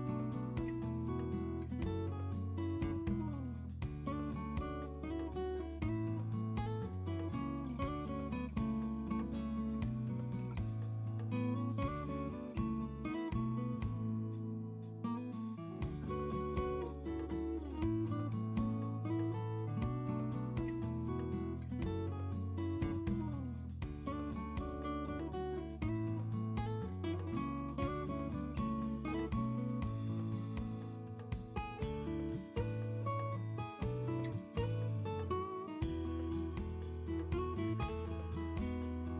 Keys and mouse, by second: 1.8 alt+shift+d, 2.0 alt+shift+d, 2.4 click, 3.1 click, 3.8 click, 4.5 shift+click, 4.9 click, 6.0 shift+f, 6.4-6.7 right drag, 7.8 shift+click, 8.0 alt+shift+d, 8.6 right click, 9.8 click, 11.6 shift+f, 13.4 shift+click, 14.2 right click, 15.4 shift+click, 16.9 right click, 17.4 click, 18.8 shift+click, 21.3 right drag, 24.0-24.4 drag, 25.9 drag, 26.6-27.3 right drag, 27.6 click, 27.9 right click, 28.4 click, 28.8-29.3 ctrl+drag, 31.8 right click.